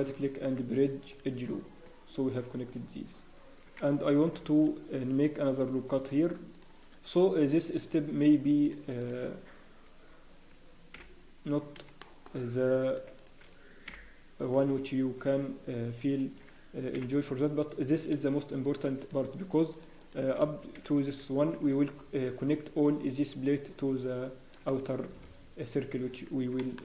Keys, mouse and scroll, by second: 9.0 shift+click, 9.6 scroll, 10.0 scroll down 1, 11.8 scroll down 2, 12.0 shift+middle click, 12.8 click, 12.8 scroll up 2, 13.1 shift+middle click, 13.8 f, 14.5 scroll, 14.8 Tab, 14.8-15.6 scroll down 1, 15.6 Tab, 15.6 scroll down 3, 16.2 scroll, 16.9 scroll down 1, 16.9 f, 17.9 click, 17.9 scroll up 2, 19.0 shift+click, 19.0-19.8 scroll down 2, 20.2 click, 20.7 f, 21.1 scroll, 21.3 Tab, 21.3-22.2 scroll down 2, 23.7 scroll down 3, 23.9 Tab, 24.7 scroll down 7, 25.3-25.8 scroll down 1, 26.0 Tab, 26.0 scroll down 1, 26.6-26.8 scroll up 3, 26.7 shift+middle click.